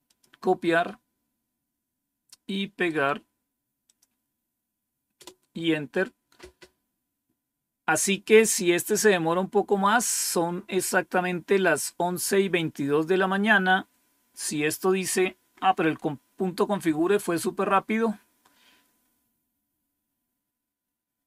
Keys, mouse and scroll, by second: 0.0 click, 2.8 right click, 3.8 click, 5.1 Return, 16.6 scroll up 1, 18.1 scroll down 1, 20.5 scroll down 2.